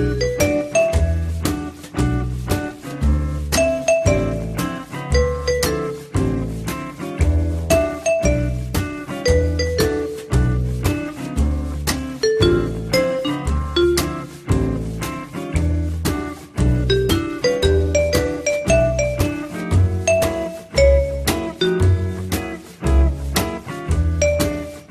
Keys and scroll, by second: 23.1 F3.